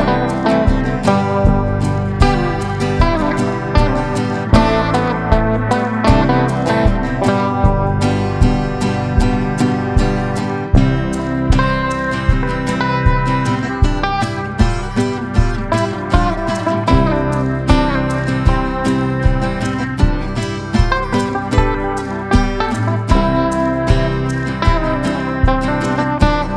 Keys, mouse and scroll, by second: 17.7 F9, 18.5-26.5 drag.